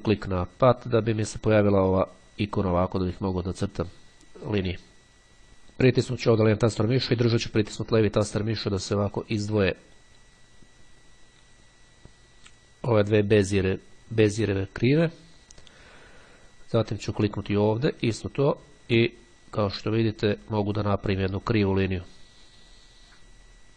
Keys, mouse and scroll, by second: 5.5-14.1 drag, 17.6-23.7 drag.